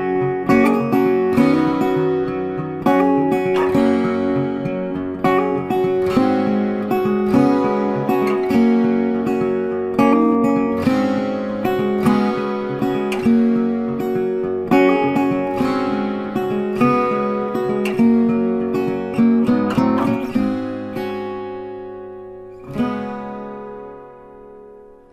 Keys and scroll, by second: 3.7 ctrl+t, 23.4 ctrl+t.